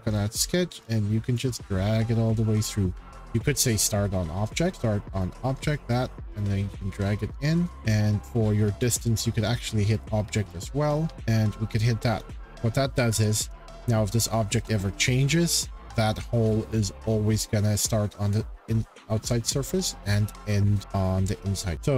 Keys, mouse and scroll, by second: 0.7 scroll, 1.3 click, 3.4 click, 4.5 click, 4.7 click, 4.7 e, 5.2 click, 5.8 click, 7.7 click, 8.8 click, 9.9 click, 10.9 shift+middle click, 11.1 click, 12.4 click, 12.9-13.4 scroll down 7, 14.2-15.2 scroll, 14.3 shift+middle click, 16.4-17.3 scroll, 20.0 shift+scroll, 20.7 scroll, 21.5 scroll, 21.7 click.